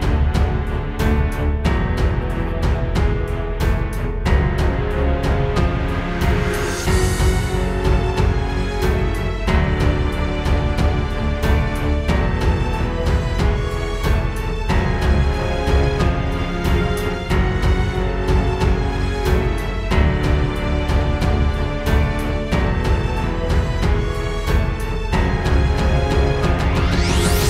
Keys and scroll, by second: 1.8 space, 3.1 super+space, 3.6 alt+super+space, 9.0 space, 16.4 super+[, 17.7 super+], 19.6 super+g, 20.0 space, 20.5 space, 20.7 space, 25.1 super+j, 25.9 super+g.